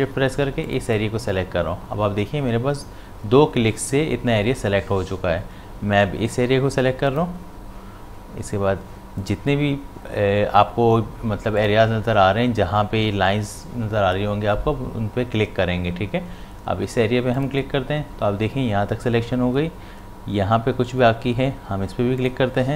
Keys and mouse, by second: 11.6 shift+click, 17.3 shift+click, 22.2 shift+click.